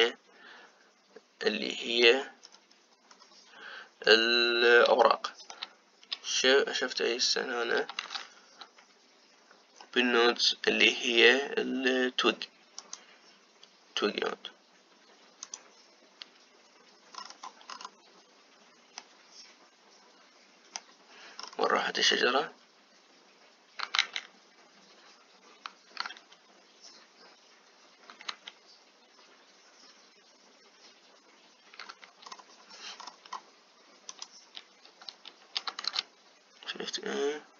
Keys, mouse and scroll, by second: 0.8-3.3 middle drag, 3.3-4.8 scroll down 6, 4.8-5.8 scroll down 2, 5.8-8.7 shift+middle drag, 8.7 shift+a, 17.8-19.2 scroll down 10, 19.2-19.7 scroll down 1, 19.7-22.1 middle drag, 22.1-22.7 scroll down 5, 22.7-24.8 scroll up 2, 24.8-27.6 scroll up 1, 27.6 ctrl+z, 31.8 ctrl+z, 32.9-34.2 scroll up 9, 34.9-36.5 drag, 36.5 shift+a.